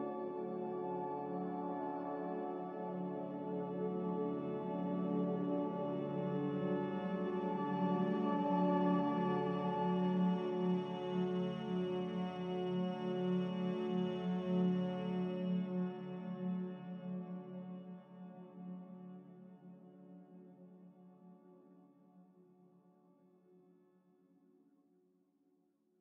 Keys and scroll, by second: 0.8 q, 8.1 q, 13.2 q.